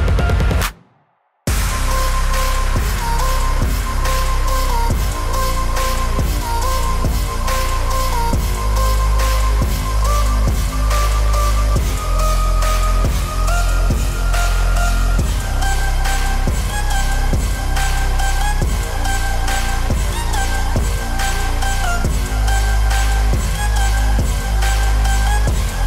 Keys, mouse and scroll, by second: 1.8 alt+space, 1.9 alt+click, 4.5 alt+click, 5.3 alt+], 8.2 alt+[, 11.2 alt+[, 11.4 alt+click, 12.1-14.4 typing, 12.2 click, 13.3 click, 13.8 click, 14.3 click, 16.4 z, 16.6-17.6 z, 17.3 click, 17.3 z, 18.6 click, 20.6 click, 21.6 click, 25.3 z, 25.6 click.